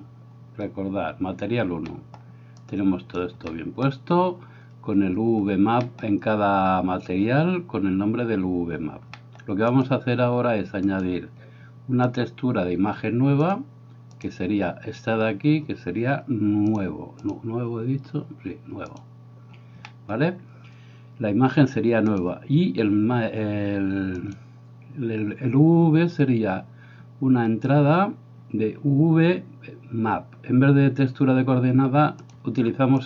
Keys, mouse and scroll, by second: 2.0 middle click, 2.7 click, 3.7 middle click, 5.9 middle click, 9.1 middle click, 11.0-14.3 drag, 17.3-19.0 drag, 19.9 middle click, 24.3-33.0 drag.